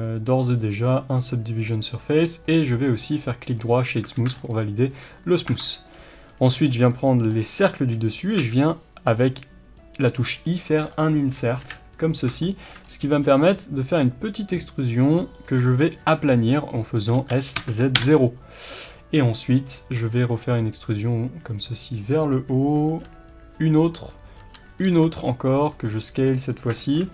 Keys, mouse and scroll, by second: 0.8 click, 1.1-2.5 drag, 2.5-3.0 middle drag, 3.0-4.5 right drag, 4.1 alt+a, 4.3 scroll down 1, 4.5-10.1 middle drag, 5.4 Tab, 5.6-6.3 scroll up 1, 6.3 b, 7.7-8.2 scroll up 1, 8.3 i, 10.1 click, 10.4-10.8 scroll down 1, 11.6 KP_1, 12.4-15.0 shift+middle drag, 12.8 scroll up 1, 13.2 e, 15.0 click, 17.1 s, 18.6 click, 20.0 e, 22.1 click, 22.8 e, 24.2 click, 24.4 e, 24.6 click, 24.8 s, 26.2 click, 26.5 scroll down 1, 26.7 shift+middle click.